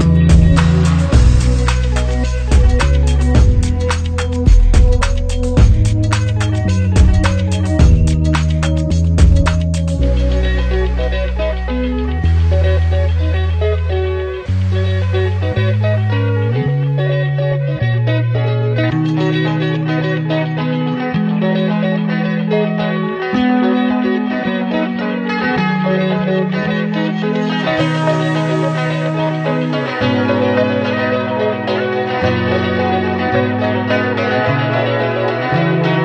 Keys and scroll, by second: 6.6 ctrl+=, 14.7 ctrl+z, 17.5 ctrl+z, 26.8 ctrl+z, 30.0 ctrl+z, 30.5 ctrl+z, 30.9 ctrl+z, 31.6 ctrl+z.